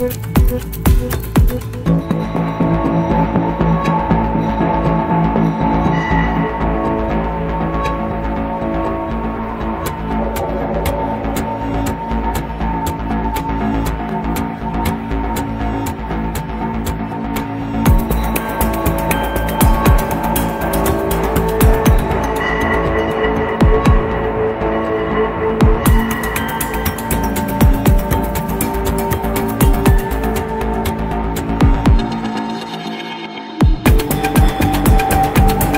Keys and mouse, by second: 0.0 click, 0.6-3.3 middle drag, 4.2 click, 6.0 Delete, 7.1 shift+click, 7.2-7.7 shift+middle drag, 8.3 ctrl+s, 10.5 click, 13.3 click, 14.2 Tab, 15.5 Tab, 16.3 click, 16.8 click, 18.6 Tab, 19.0 click, 21.1-22.5 drag, 33.0-33.5 shift+middle drag, 34.2 ctrl+s, 34.7-35.2 middle drag.